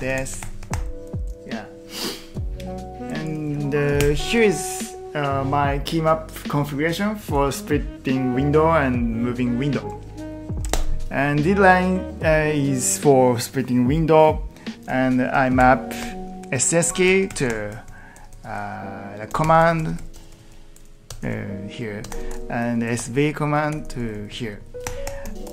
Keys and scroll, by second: 3.9 ctrl+t, 4.0 n, 10.4-11.2 typing, 15.3 Escape, 15.6-20.6 typing, 22.0-24.6 typing.